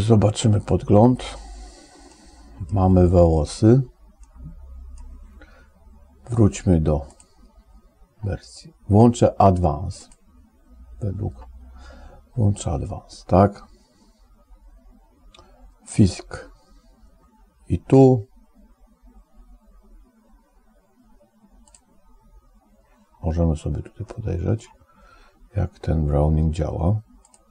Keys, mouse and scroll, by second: 2.1 click, 4.2 click, 7.0 click, 10.1 click, 21.8 click, 24.1 middle click.